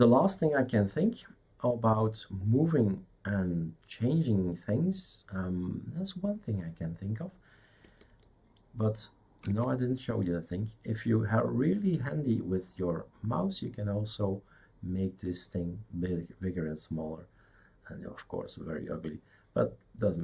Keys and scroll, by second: 9.5 shift+super+space.